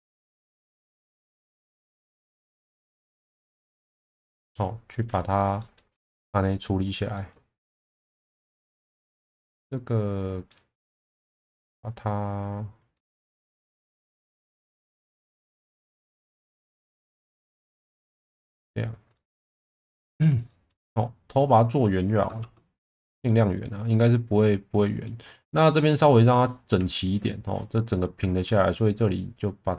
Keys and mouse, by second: 0.5 shift+middle click, 2.3 g, 2.4 b, 4.9 click, 5.6 middle click, 6.0 shift+middle click, 6.4 middle click, 7.1 shift+middle click, 8.2 middle click, 9.0 click, 9.4-10.5 middle drag, 11.0 click, 11.9 click, 13.3 shift+Tab, 14.0 ctrl+x, 15.2 ctrl+shift+z, 16.2 ctrl+z, 18.4 middle click, 19.1 middle click, 20.5 middle click, 22.4 shift+Tab, 22.9 click, 23.8 middle click, 24.9 middle click, 26.7 alt+middle click, 29.1 click.